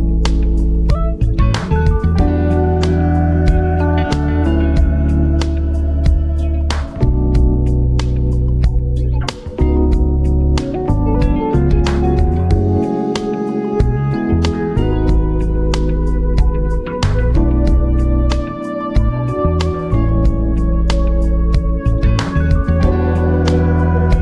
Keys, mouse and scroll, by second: 1.6-2.1 scroll up 2, 7.5 click, 11.1-13.8 drag, 16.6 scroll up 2, 16.8 Return, 17.1-18.1 scroll down 2, 21.8 click.